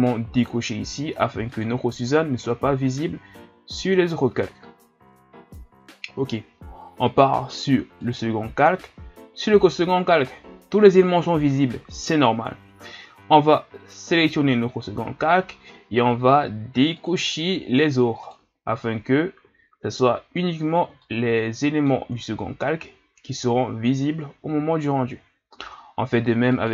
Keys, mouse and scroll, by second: 0.6 click, 1.7 click, 7.0-13.4 drag, 14.2 click, 17.1 click, 18.3 click, 21.0-26.5 middle drag, 26.5-26.7 drag.